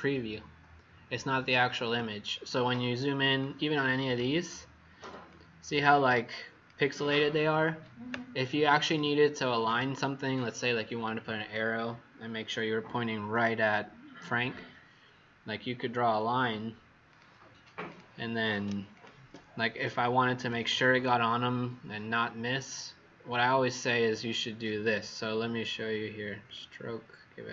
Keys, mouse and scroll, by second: 1.8 z, 3.3 click, 5.2 click, 6.1 click, 8.7 click, 18.8 shift+click, 20.3 click.